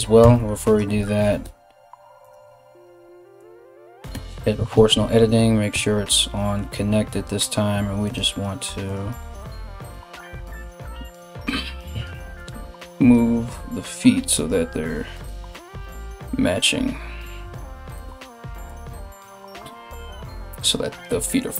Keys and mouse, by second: 0.3 right click, 1.0 g, 3.7 o, 4.3 alt+o, 5.3 g, 8.5 right click, 8.6 g, 9.3 g, 9.9 right click, 10.2 g, 12.0 right click, 12.1 g, 13.0 right click, 13.2 g, 14.0 right click, 14.2 g, 15.1 right click, 15.3 g, 18.3 right click, 18.5 g.